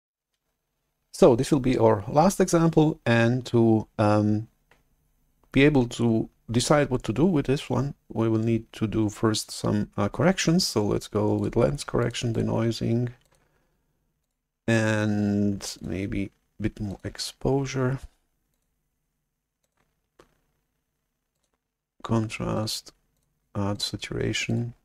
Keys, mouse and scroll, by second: 11.5 click, 11.9 click, 12.3 drag, 13.1 click, 14.1 drag, 15.6 click, 16.8 click, 18.4 drag, 19.5 click, 21.2 click, 22.4 drag, 23.0 click, 23.6 click, 24.4 drag.